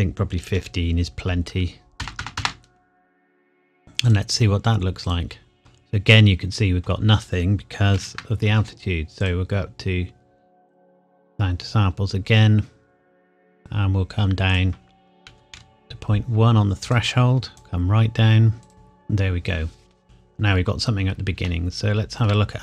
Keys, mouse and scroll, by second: 0.4 KP_1, 0.6 KP_5, 2.0 KP_0, 4.1 click, 5.6-7.5 scroll up 1, 7.9 ctrl+z, 9.2 click, 13.5 click, 15.3 KP_Decimal, 15.6 KP_1, 16.9 click, 20.0-21.4 scroll up 1, 21.5 shift+middle click.